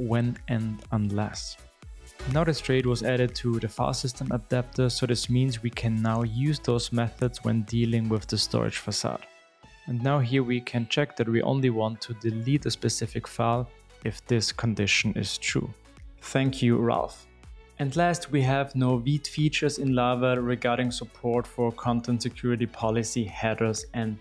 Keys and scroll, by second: 3.6 super+e, 10.0 super+v.